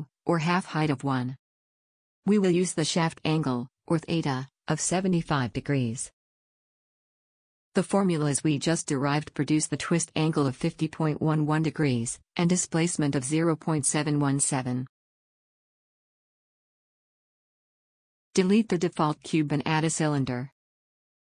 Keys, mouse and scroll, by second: 19.0 x, 19.8 shift+a.